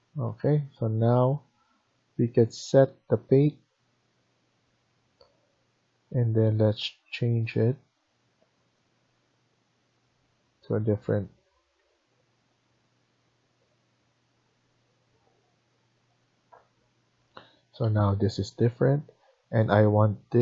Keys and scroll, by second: 0.1 Escape, 11.4 Escape, 11.7 Escape.